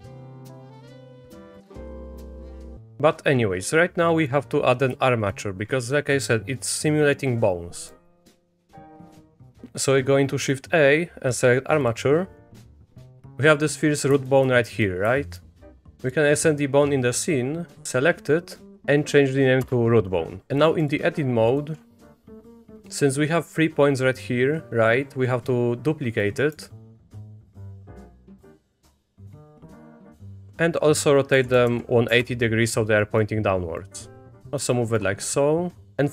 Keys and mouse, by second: 0.3 middle click, 0.8 middle click, 1.6 middle click, 1.8 Tab, 2.1 click, 4.2 click, 5.2 shift+click, 7.9 middle drag, 8.6 middle click, 8.8 middle drag, 9.1 shift+a, 13.1-14.3 drag, 14.5 shift+middle click, 17.8 Tab, 18.7 click, 18.7 o, 20.5 Tab, 20.5 shift+click, 20.5 a, 21.5 click, 22.1 click, 22.4 shift+d, 28.0 click, 28.2 shift+d, 28.8 a, 28.9 click, 29.3 click, 29.5 r, 33.1 click, 33.9 middle click, 34.4 g, 34.8 shift+click, 35.9-36.1 drag.